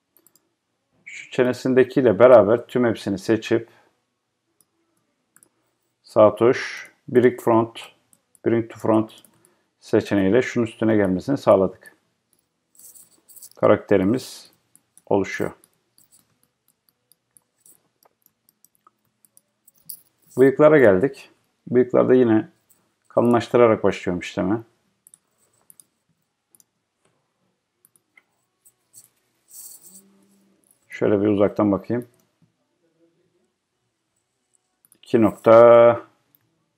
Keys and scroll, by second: 36.5 Return.